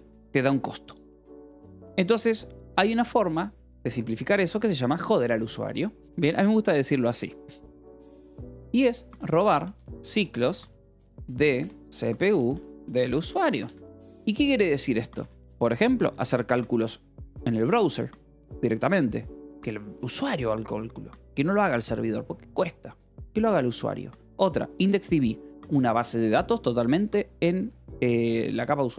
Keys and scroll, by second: 8.8-14.5 typing, 15.6 shift+v, 15.9 Escape.